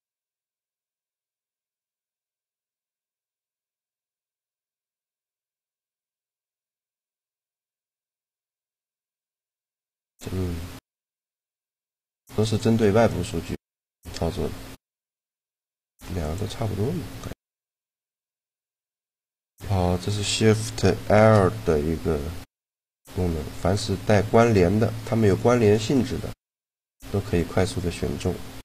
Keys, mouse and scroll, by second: 0.0 click, 0.8-3.6 middle drag, 4.3 a, 5.3 ctrl+l, 6.9 right click, 7.8 shift+l, 10.0 click, 10.5 middle click, 12.0 g, 13.2-16.0 middle drag, 14.7 g, 16.0-17.7 drag, 19.1-20.5 drag, 20.5 shift+l, 23.2 click, 24.3-26.5 right drag.